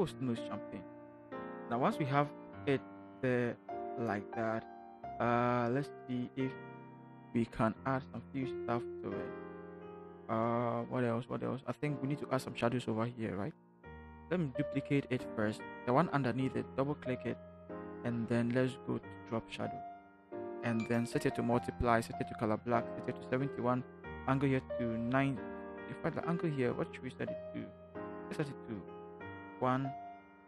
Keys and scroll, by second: 15.1 ctrl+j, 29.5 1.